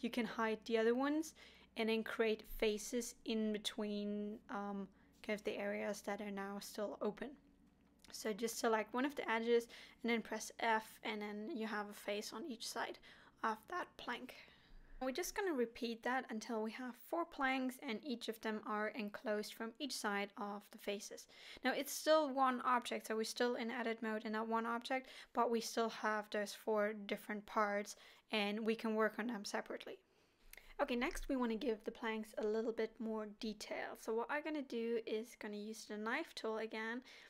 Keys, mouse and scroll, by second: 1.2 alt+h, 1.7 middle click, 2.3 alt+a, 3.5 l, 4.9 shift+h, 5.5 middle click, 6.3 click, 7.4 f, 7.7 middle click, 8.7 click, 9.1 f, 9.5 middle click, 11.0 alt+h, 11.6 middle click, 12.0 alt+a, 13.0 l, 14.0 shift+h, 14.4 middle click, 15.3 click, 16.4 f, 16.8 middle click, 17.6 click, 18.0 f, 18.4 middle click, 19.3 alt+h, 19.8 middle click, 20.3 alt+a, 21.1 l, 21.7 middle click, 23.1 shift+h, 23.6 middle click, 24.1 click, 24.9 f, 25.5 middle click, 27.3 middle click, 28.6-29.9 scroll up 2, 29.9 k, 34.1 middle click, 36.9 k.